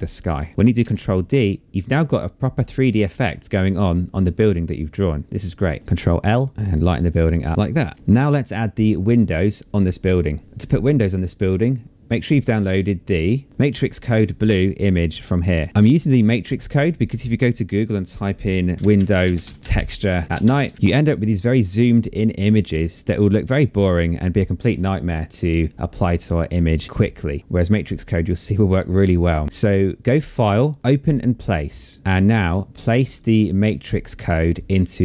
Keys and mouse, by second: 0.2 ctrl+d, 1.7 click, 4.2 ctrl+l, 6.1 click, 6.8 click, 7.5 ctrl+d, 7.5 f, 7.6 Escape, 11.2 click, 13.0 click, 16.4 click, 17.9-20.6 typing, 26.8 click, 27.5 click, 29.4 click, 30.8 click, 32.3 click, 34.3 click.